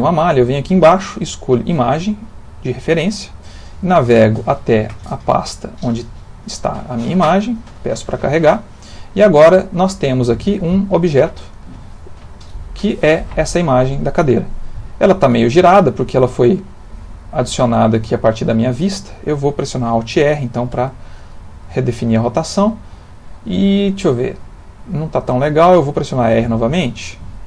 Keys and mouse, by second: 9.1 middle click, 9.8 click, 10.5 g, 11.8 middle click, 13.8 middle click, 13.9 middle click, 16.9 middle click, 17.8 middle click, 18.7 middle click, 20.7 alt+r, 21.7 middle click, 23.7 middle click, 24.5 middle click.